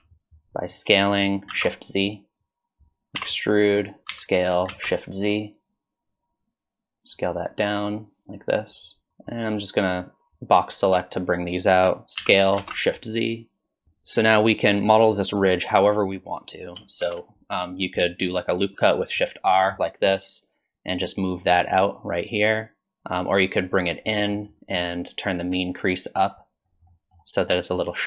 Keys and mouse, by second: 2.5 click, 3.2 e, 7.2-9.1 drag, 9.1 1, 9.2-11.0 drag, 12.2 s, 17.0 ctrl+r, 19.9 middle click, 21.0-24.1 drag, 22.5 typing, 24.1 middle click, 25.5-26.7 drag, 26.9 middle click, 27.9 middle click.